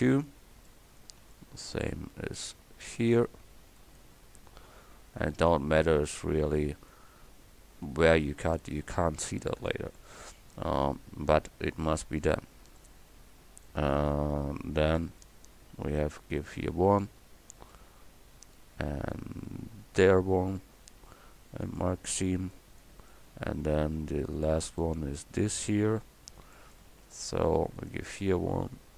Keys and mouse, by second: 0.1 middle click, 1.4 click, 1.7 click, 6.0-7.3 drag, 6.7 a, 13.8-17.7 middle drag, 17.7 right click, 17.7 middle click, 18.1-19.1 middle drag, 22.5-24.9 middle drag, 25.0 middle click, 25.7 middle click, 26.2 middle click.